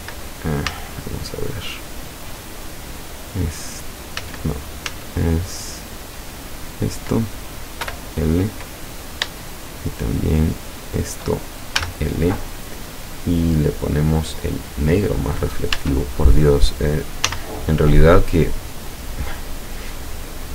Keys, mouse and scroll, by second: 0.7 z, 3.5 right click, 4.2 z, 4.9 z, 6.6 right click, 7.9 l, 9.7 shift+middle click, 10.9 shift+right click, 11.8 l, 13.5 click, 14.5 click, 15.8 Tab, 16.5-16.9 scroll down 2, 17.3 z, 17.8-18.1 scroll down 2, 18.3 middle click, 19.0-20.0 middle drag, 20.2 middle click.